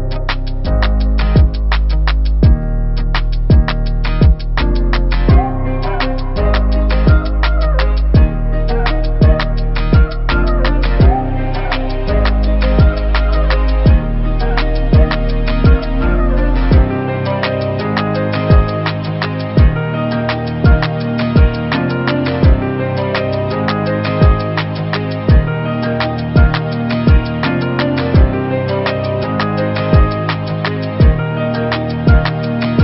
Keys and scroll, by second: 1.0 t, 2.9 ctrl+a, 11.6 ., 15.9 v, 29.6 v.